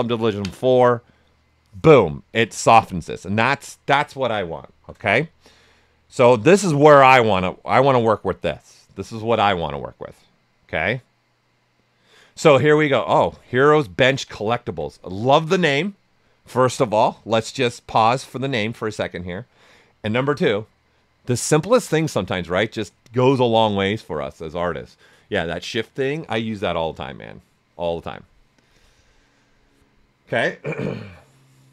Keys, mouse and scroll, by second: 4.7 shift+f, 6.1 shift+m, 6.9 ctrl+right click, 7.7 typing, 12.5 right click, 13.6 ctrl+right click.